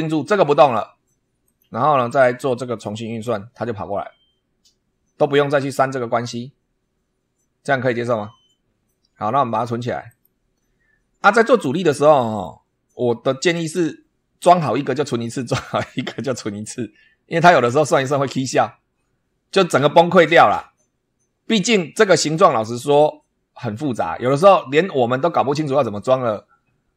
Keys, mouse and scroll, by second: 1.4 click, 2.7 click, 10.0 click, 11.8-12.5 middle drag, 21.5 scroll down 2, 22.0-22.6 scroll up 4.